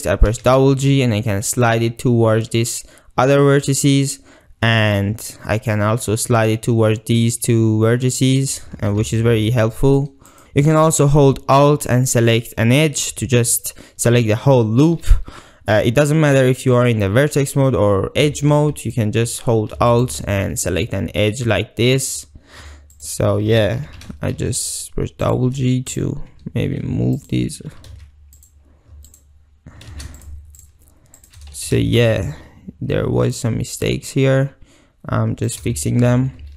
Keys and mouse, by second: 0.3 g, 0.5 g, 8.4 click, 9.0 ctrl+z, 12.3 alt+click, 18.3 2, 19.9 alt+click, 23.0 alt+click, 23.8 g, 24.1 g, 25.9 click, 28.0 ctrl+z, 30.0 ctrl+z, 31.2 shift+middle click, 31.6 g, 35.5 shift+middle click, 35.8 shift+middle click.